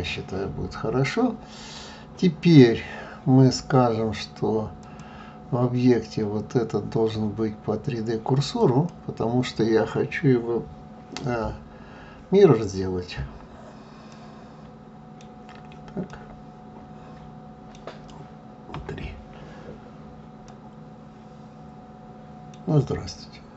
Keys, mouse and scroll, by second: 4.8-7.8 drag, 14.1-18.7 middle drag, 18.7 KP_3, 20.5-22.8 middle drag, 22.8 KP_3.